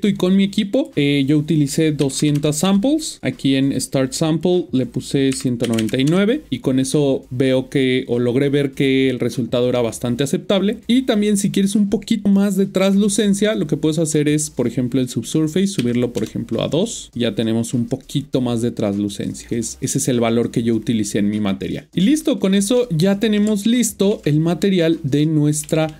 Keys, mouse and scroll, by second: 0.7 click, 1.9 click, 2.3 typing, 2.6 Return, 3.4 click, 5.2 typing, 6.0 Return, 14.1 click, 15.8 typing, 16.2 Return, 21.9 scroll down 1, 22.7 scroll down 3, 22.8 middle click, 24.5-25.2 scroll down 2, 25.2 middle click.